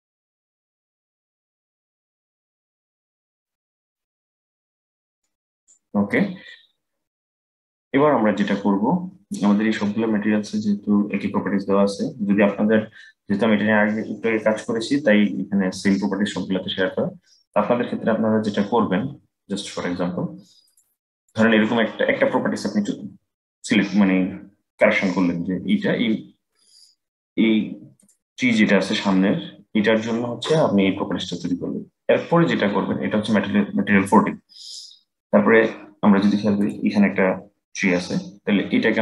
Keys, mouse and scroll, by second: 5.8 click, 20.3-23.4 drag, 24.8-26.9 scroll down 9, 26.9 click, 27.7 click, 28.9-29.7 scroll down 1, 36.3 click.